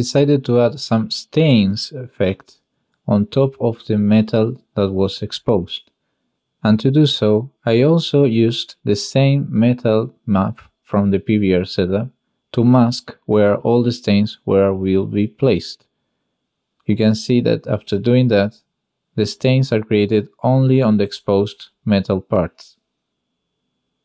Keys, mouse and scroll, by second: 0.4-1.0 drag, 3.0-3.3 drag, 4.2 click, 5.9 click, 6.8 click, 7.9-8.9 drag, 10.6 click, 11.0 click, 11.0 n, 11.3 click, 11.9 click, 12.3 click, 12.5 click, 12.6 g, 14.9 click, 15.6-16.0 drag, 16.6 click, 17.7 click, 18.2 n, 18.9-21.7 drag, 21.9 click, 22.9 click, 23.5 middle click.